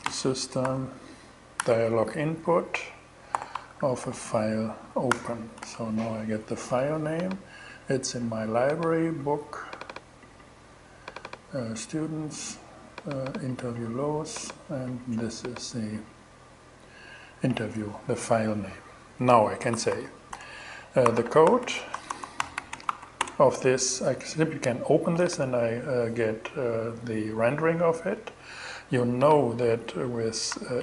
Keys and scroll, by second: 0.0-0.1 typing, 1.0 Return, 1.9 alt+Return, 2.8 alt+g, 3.1 alt+shift+2, 3.5 shift+f, 5.0 shift+Return, 19.3-23.6 typing, 29.9 shift+super+e.